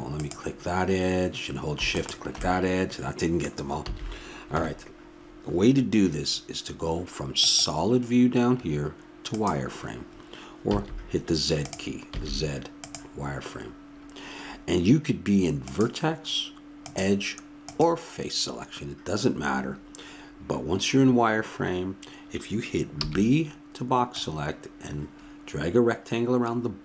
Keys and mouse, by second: 3.7 middle click, 3.8 a, 4.5 KP_1, 7.4-9.2 drag, 10.7 z, 12.1 z, 15.6-19.5 drag, 22.9 b.